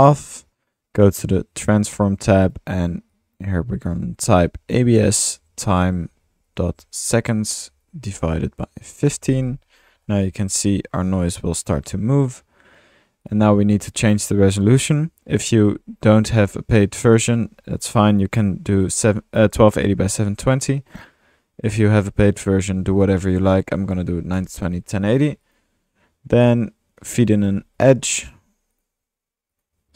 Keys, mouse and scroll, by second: 1.0 drag, 2.4 click, 10.9 middle click, 13.2-13.8 drag, 14.2-14.6 middle drag, 14.2-14.7 typing, 14.6 drag, 21.8-22.1 drag, 25.4 click, 25.6 drag, 26.5-27.2 drag, 27.1-28.3 typing, 28.8 middle click, 28.9 drag, 29.6 click.